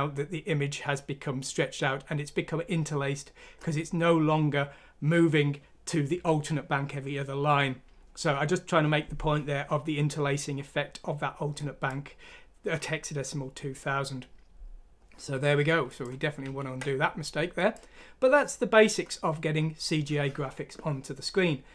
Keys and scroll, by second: 16.4 ctrl+z.